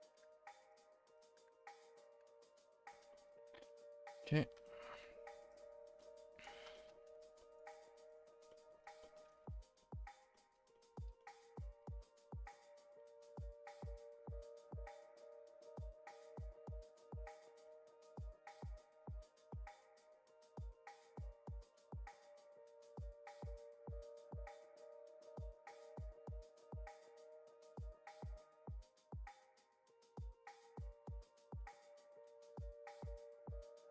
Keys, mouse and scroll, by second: 0.0 click, 1.1 click, 5.9-6.4 middle drag, 6.4-7.1 scroll up 10, 6.7 shift+middle drag, 7.1 a, 7.4 middle drag, 7.7 Tab, 8.1 click, 8.3 Tab, 8.5 middle drag, 9.8 middle click, 13.0 KP_3, 13.8 shift+middle drag, 14.0-14.6 scroll up 2, 14.6 shift+middle click, 15.4 r, 16.5 g, 17.6-18.2 middle drag, 18.2-18.8 scroll down 4, 18.8 shift+middle drag, 19.1-19.5 scroll up 1, 19.5-20.5 middle drag, 20.5 l, 21.2 a, 21.7 l, 24.7 a, 26.7 a, 27.0 shift+middle drag, 27.2-27.7 scroll up 2, 27.7-28.9 middle drag, 28.9-31.1 typing, 30.0 Escape, 32.0 ctrl+z, 32.2 g, 33.6-33.9 middle drag.